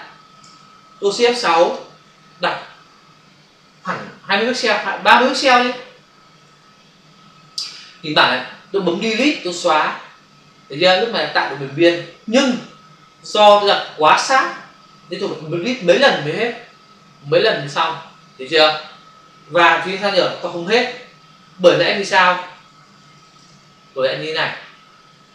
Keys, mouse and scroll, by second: 0.4 ctrl+alt+z, 1.7 shift+F6, 6.4 Return, 9.6 Delete, 12.7 Delete, 15.8 Delete, 20.1 ctrl+d.